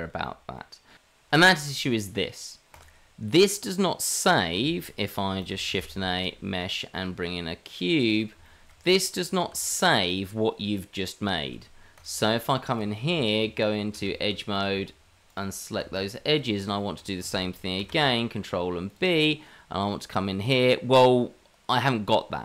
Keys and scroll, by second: 5.7 shift+a, 9.4 g, 11.4 s, 13.4 Tab, 17.8 ctrl+b.